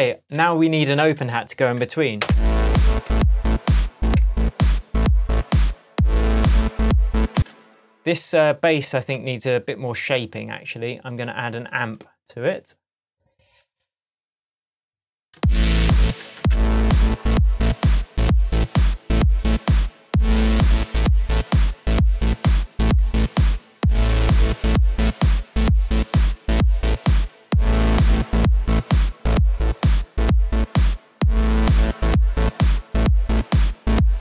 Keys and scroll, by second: 2.2 space, 3.0 shift+Tab, 5.0 Tab, 7.3 space, 15.3 space, 22.8 super+z, 23.5 shift+super+z.